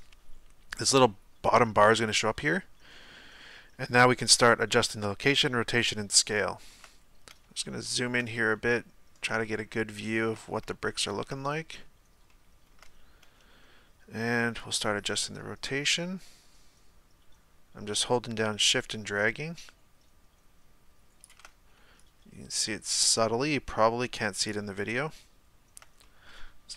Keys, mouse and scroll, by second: 6.2-7.0 shift+middle drag, 7.0-7.6 scroll up 2, 7.6-10.5 shift+middle drag, 10.5-10.8 scroll up 1, 10.9-11.5 shift+middle drag, 11.5-12.3 scroll up 1, 12.3-15.5 shift+middle drag, 15.5-17.6 shift+drag, 22.2-26.1 shift+drag, 26.1 middle click.